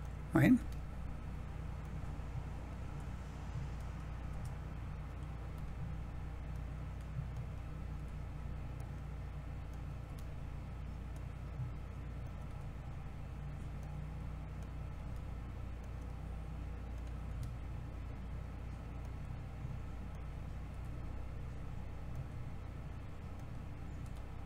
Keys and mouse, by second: 0.5 g, 4.2 r, 5.4 g, 6.4 click, 7.9 g, 8.7-9.7 drag, 11.0 click, 13.7 click, 15.7-16.9 drag, 18.9-20.1 drag, 20.6 g, 23.9 g.